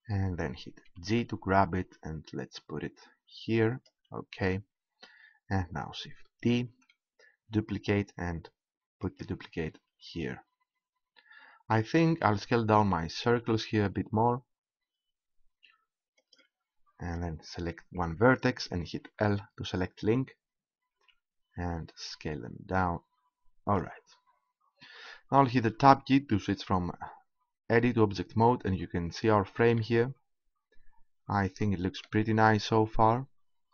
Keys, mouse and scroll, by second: 0.9 g, 3.8-5.6 drag, 6.4 shift+d, 9.1-13.2 drag, 13.2 s, 16.3-17.9 drag, 17.0-18.1 right drag, 18.1 click, 18.2 right click, 19.1 l, 20.9 s, 23.8-25.5 drag, 25.6 Tab, 29.8 click, 29.9 middle click, 30.6 click.